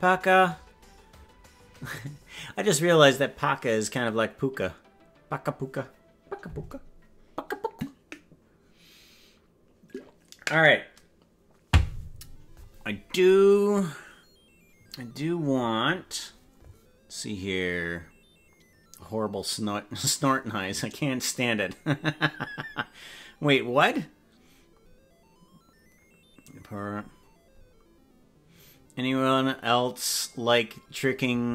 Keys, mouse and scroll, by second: 15.9 scroll up 4.